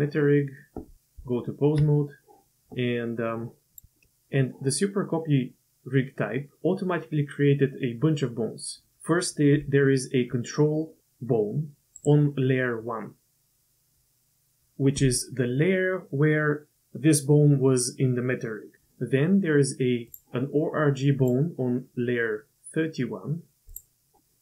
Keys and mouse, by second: 0.4 middle click, 1.2 Tab, 9.6 g, 20.1 click, 21.2 click, 23.7 click.